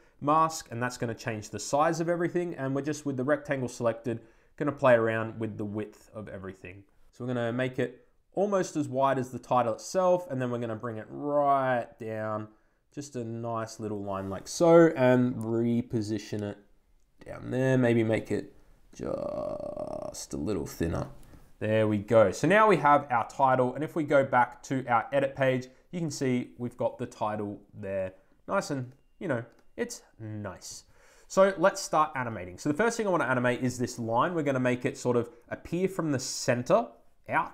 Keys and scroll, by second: 0.1 Return.